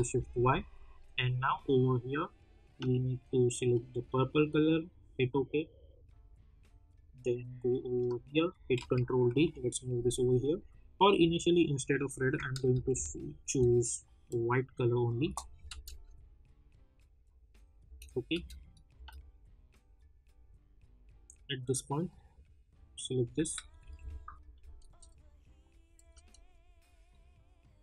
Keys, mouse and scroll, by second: 1.2-8.7 drag, 8.7 ctrl+d, 9.3 [, 10.5 click, 12.7 ctrl+shift+y, 14.2 click, 15.2 Return, 15.6 space, 19.9-21.9 drag, 23.8 ctrl+shift+y, 25.9 click.